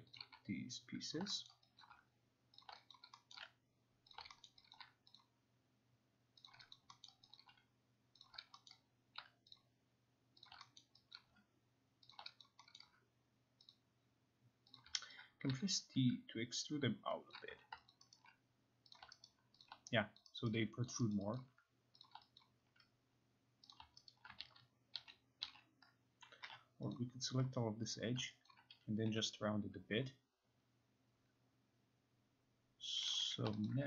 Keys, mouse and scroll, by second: 0.2 click, 1.1 shift+click, 1.5 alt+middle click, 1.9 alt+click, 2.5 alt+click, 2.6 shift+click, 2.9 alt+click, 3.4 alt+middle click, 4.0 alt+middle click, 4.1 shift+click, 4.5 alt+middle click, 4.8 alt+click, 5.2 shift+click, 6.5 shift+click, 6.7 alt+click, 7.1 alt+middle click, 7.4 alt+click, 8.3 shift+click, 8.7 alt+middle click, 9.6 shift+click, 10.5 shift+click, 10.8 alt+middle click, 11.2 alt+click, 11.9 alt+click, 12.1 shift+click, 12.4 alt+click, 12.8 alt+middle click, 13.7 shift+click, 14.8 shift+click, 15.1 alt+right click, 15.5 t, 17.3 click, 17.5 q, 17.9 alt+click, 18.2 alt+right click, 19.3 alt+right click, 19.3 click, 19.7 alt+right click, 20.2 alt+click, 20.5 alt+right click, 21.4 alt+click, 22.4 alt+click, 23.7 click, 24.1 alt+right click, 24.5 ctrl+z, 25.0 ctrl+z, 25.5 ctrl+z, 26.1-27.0 typing, 26.9 click, 27.9 click, 28.5 alt+click, 28.7 alt+click, 28.7-29.1 typing, 33.1 click, 33.2 typing, 33.7 alt+click.